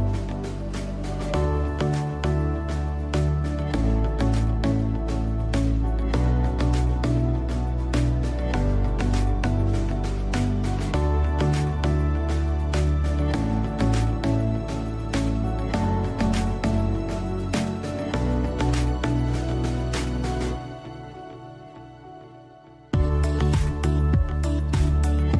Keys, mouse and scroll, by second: 10.4-16.0 drag, 16.9 scroll down 1, 17.9 scroll up 1, 19.2 click, 22.2 scroll up 1, 23.5 scroll down 1.